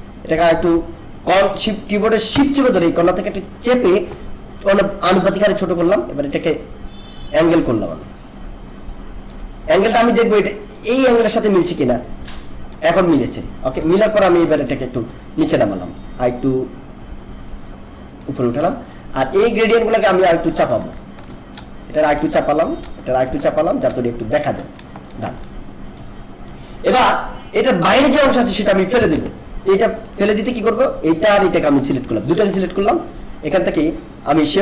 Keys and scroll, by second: 29.1 ctrl+=.